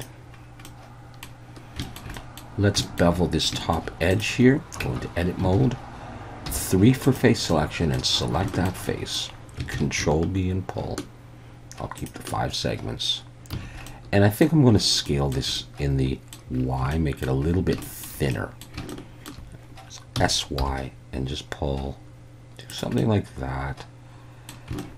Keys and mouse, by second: 0.7-1.2 middle drag, 1.8 shift+middle drag, 2.2 middle drag, 2.8 shift+middle drag, 3.5 shift+middle drag, 4.1 click, 4.8 Tab, 5.6 alt+a, 6.5 3, 7.0 click, 7.5 middle click, 7.8 click, 8.5 shift+middle click, 8.8 middle click, 9.7 ctrl+b, 12.0 shift+click, 13.5 a, 13.9 middle click, 15.1 shift+middle click, 15.6 middle click, 16.9 shift+middle click, 17.8 shift+middle click, 18.3 middle click, 18.9 shift+middle click, 20.2 s, 20.6 y, 22.7 click, 23.0-24.5 middle drag, 24.8 shift+middle click.